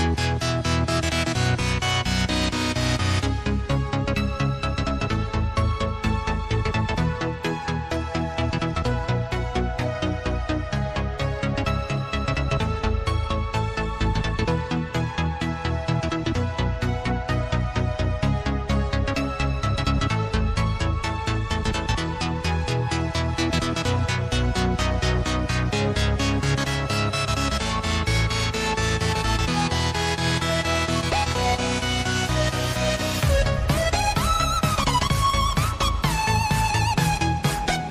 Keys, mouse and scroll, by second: 0.8 click, 5.0 KP_3, 5.7-6.7 scroll up 1, 6.7 shift+a, 9.3 click, 13.7 click, 15.5 click, 19.2 click, 26.5 click, 29.3 s, 31.5 click, 33.1 click, 34.4 click, 35.7-36.8 drag.